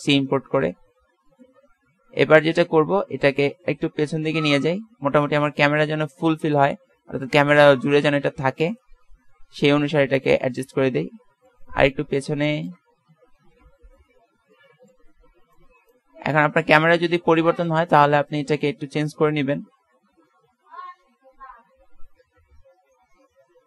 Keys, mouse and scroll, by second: 2.6 KP_7, 4.8 KP_0, 7.8 s, 9.6 click, 10.6 middle click, 10.8 middle click, 12.9 KP_0, 17.6 s, 19.9 KP_0, 21.9 s, 23.2 s.